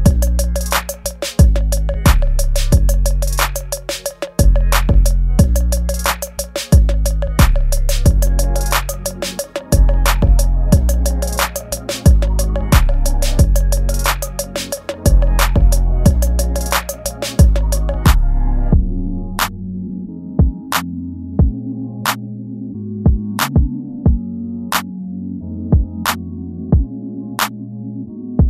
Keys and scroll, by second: 1.1 space, 2.3 ctrl+c, 3.3 ctrl+v, 4.5 space, 5.2 space, 7.1 space, 7.7 ctrl+z, 7.9 space, 8.1 space, 10.3 space, 11.4 ctrl+c, 11.5 Escape, 11.6 space, 12.8 ctrl+v, 14.1 ctrl+z, 16.9 ctrl+z, 17.1 space, 17.5 ctrl+z, 19.7 space, 21.6 space, 22.5 ctrl+z, 22.9 space, 23.2 space, 26.7 ctrl+shift+[, 27.0 alt+shift+\, 27.9 ctrl+s.